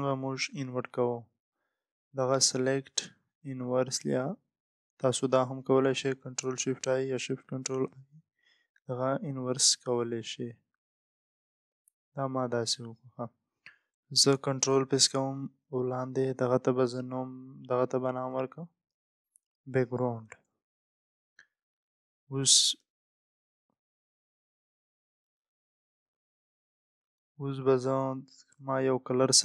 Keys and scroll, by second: 21.4 Return, 22.0 Return, 29.2 Return.